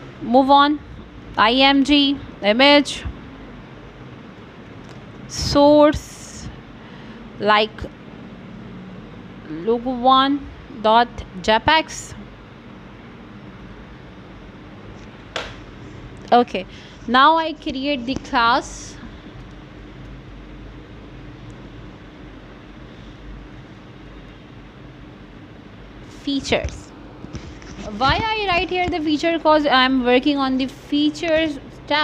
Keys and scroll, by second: 0.5 ., 9.1 space, 9.8 c, 10.8 Return, 12.8 Right, 13.7 shift+., 18.9 f, 21.7 s, 24.6 space, 25.0 i, 30.7 -.